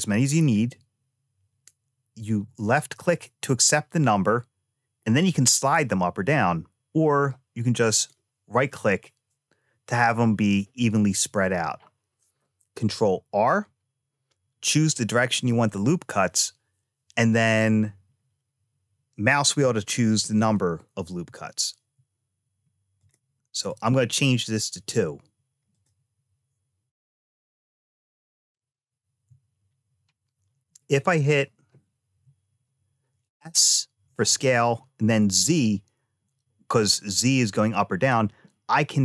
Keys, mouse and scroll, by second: 22.8 click, 23.3 click, 25.5 click, 28.3 ctrl+z, 31.4 s.